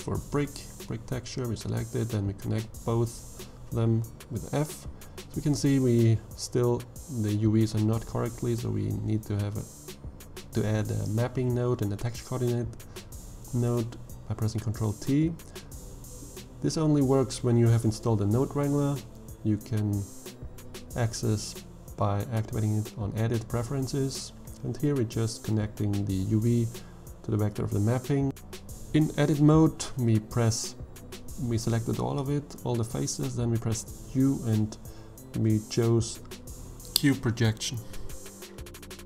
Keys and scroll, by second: 2.6 f, 10.5 ctrl+t, 16.4 n, 16.7 o, 17.3 d, 17.5 e, 27.3 Tab, 29.6 3, 32.2 u.